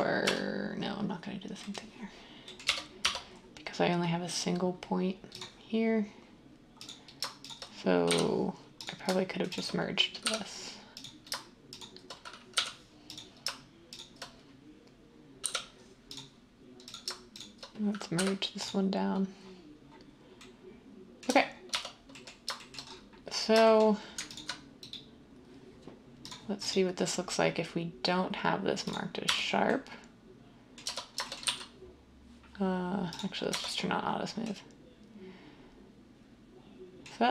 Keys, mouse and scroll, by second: 0.2 Tab, 2.6 1, 3.0 Tab, 8.1 j, 10.2 j, 12.5 j, 18.2 m, 21.2 Tab, 21.7 Tab, 29.2 Tab, 30.8 Tab, 31.4 typing, 33.5 Tab.